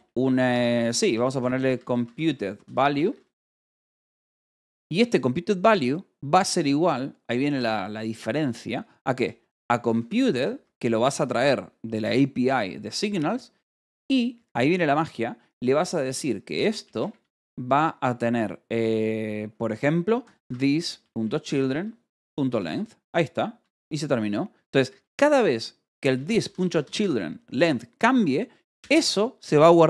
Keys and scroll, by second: 0.6-5.1 typing, 8.0-11.6 typing, 13.0 BackSpace, 13.7 space, 14.8 }, 14.9 BackSpace, 15.6 =, 16.7 BackSpace, 17.2 space, 20.1-22.1 typing, 22.9 Escape, 23.4-26.8 typing, 24.5 Escape, 28.0 Escape, 28.7 h.